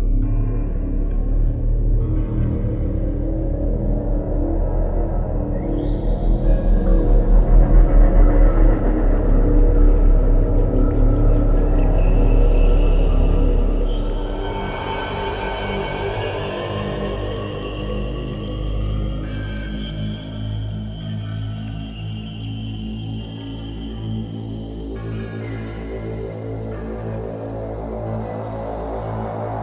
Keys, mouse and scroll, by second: 0.0 click, 2.1 click, 3.4-3.9 scroll up 3, 3.9 click, 5.4 click, 6.3 scroll up 3, 7.3-7.7 scroll up 1, 9.4 click, 11.4 middle click, 12.4-13.0 scroll up 3, 14.9 click, 17.0 click, 18.3 click, 20.5 click, 20.9 z, 23.3 click, 25.5-26.4 scroll down 4, 26.8 scroll down 2, 27.5-28.0 scroll down 1, 28.7 middle click.